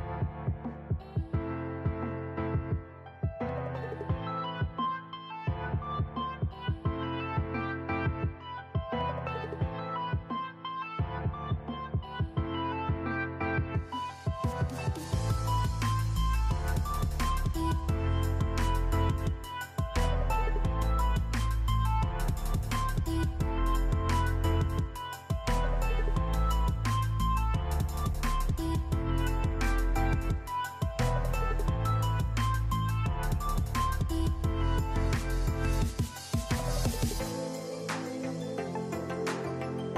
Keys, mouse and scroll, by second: 1.1-1.6 drag, 2.0 click, 2.4 click, 3.2-39.0 drag, 39.8 click.